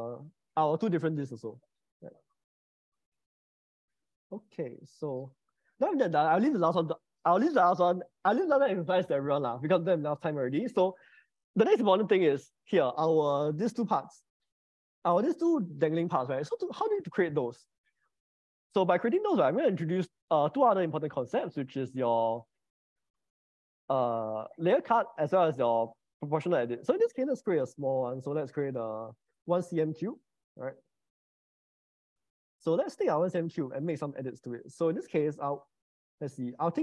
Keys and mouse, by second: 2.5 middle click, 13.6 shift+middle click, 17.6 middle click, 18.6 middle click, 19.7-23.0 drag, 26.7-29.5 drag, 28.3 0, 30.9 middle click, 32.1 middle click, 32.9 click, 35.8-36.8 middle drag.